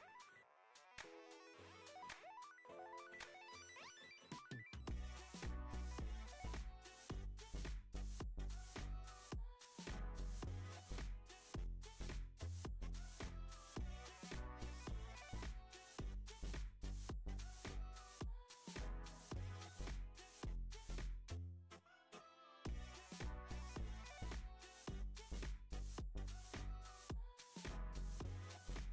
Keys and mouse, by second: 1.8 s, 3.3 g, 4.9-5.3 shift+middle drag, 6.5 shift+a, 10.4 g, 11.8 s, 13.5 shift+middle drag, 14.2 Tab, 14.9 f, 15.2 e, 18.2 ctrl+r, 20.6 click, 21.2 click, 21.8 alt+shift+click, 22.0 alt+shift+click, 22.7 shift+middle click, 23.9 shift+middle click, 28.4 alt+z, 28.8 click.